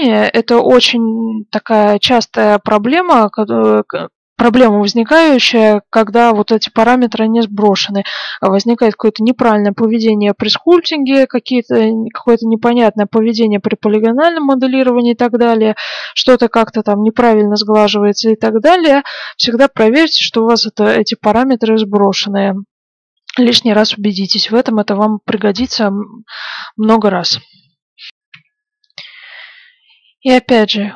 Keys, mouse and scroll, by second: 27.0-28.2 middle drag, 28.3 F9.